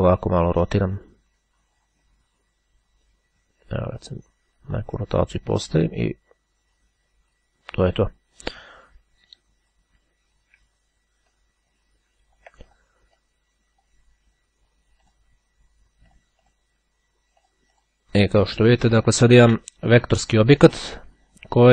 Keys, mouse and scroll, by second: 6.0-8.6 drag, 9.0 click, 11.5-13.4 ctrl+drag, 15.2 click, 16.3 click, 17.4-18.5 drag, 19.2-19.6 ctrl+scroll up 2, 20.4 click.